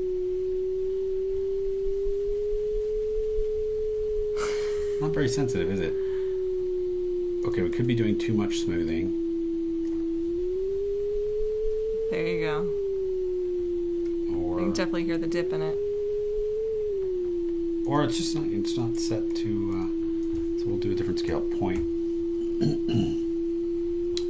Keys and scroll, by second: 7.7 super+e, 18.9 super+e, 21.3 BackSpace, 21.7 ., 22.5 Right, 22.9 BackSpace.